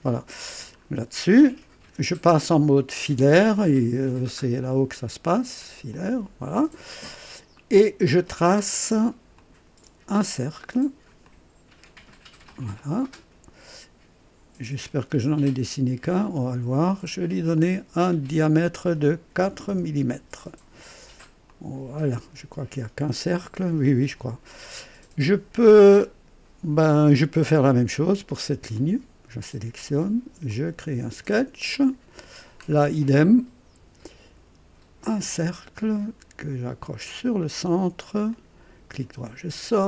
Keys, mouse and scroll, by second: 0.8 scroll up 1, 1.4 right click, 4.6 click, 5.9 click, 6.8 scroll up 1, 7.6 right click, 9.3 click, 11.2 click, 12.2 click, 12.8 right click, 16.1 click, 17.5 click, 19.4 KP_4, 19.7 Return, 21.5 click, 28.7 click, 30.5 click, 31.7 click, 32.6-33.0 scroll up 1, 33.2 right click, 35.2 click, 37.4 click, 38.3 click, 38.9 right click.